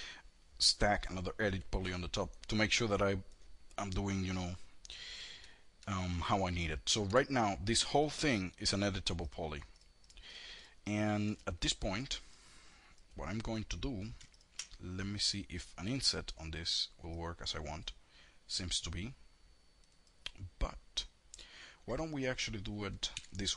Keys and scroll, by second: 6.3 4, 22.2 2.